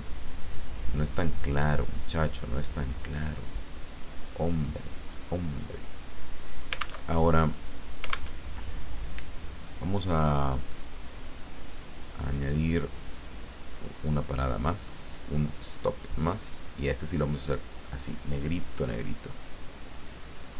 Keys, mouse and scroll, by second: 0.2-5.3 drag, 6.2 click, 7.0 alt+Tab, 8.3 alt+Tab, 10.7 click, 11.7 click, 13.0 click, 14.5 click, 16.4-17.7 drag, 20.0-20.5 drag.